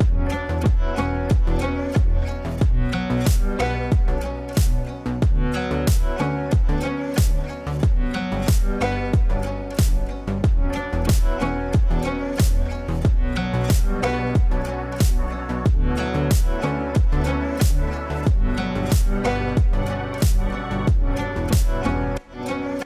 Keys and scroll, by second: 12.2 v.